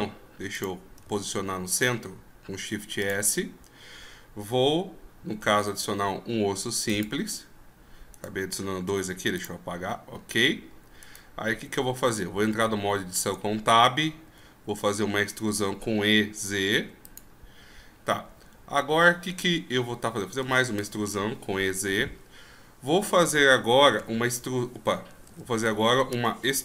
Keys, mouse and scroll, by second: 1.0 shift+s, 5.6 shift+a, 8.1 right click, 8.8 x, 9.8-11.0 scroll up 6, 11.0 right click, 11.8 Tab, 13.4 shift+scroll up 5, 14.2 e, 17.6 scroll up 1, 17.9 scroll down 3, 20.4 e.